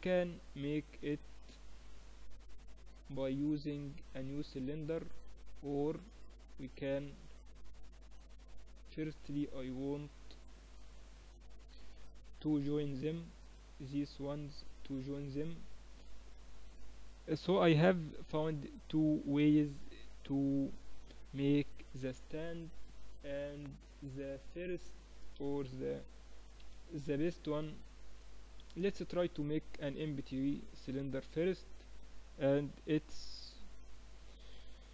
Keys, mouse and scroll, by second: 3.7 middle click, 4.8 middle click, 5.3 Tab, 6.3 click, 7.9 click, 8.5-13.2 middle drag, 13.2-14.8 right drag, 16.2-23.5 middle drag, 21.7 Tab, 23.5 Tab, 24.0-26.7 middle drag, 25.0 KP_1, 26.2 KP_3, 27.9 a, 28.7 shift+a.